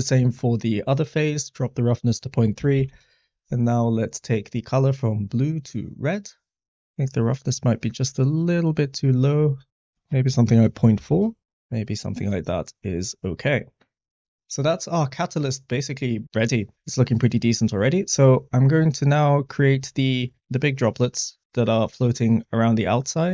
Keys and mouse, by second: 0.1 middle click, 1.4-2.9 drag, 4.2 click, 7.2-11.1 drag.